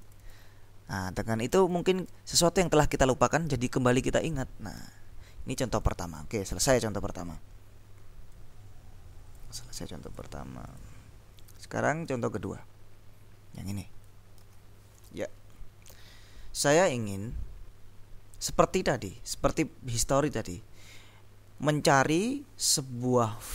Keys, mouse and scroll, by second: 0.1 click, 1.6-2.7 drag, 3.5-5.0 scroll up 2, 5.9 click, 6.6-7.5 scroll down 2, 8.5-9.9 drag, 10.1-11.4 drag, 11.6 click, 14.6 ctrl+b, 15.2 click, 16.0 ctrl+l.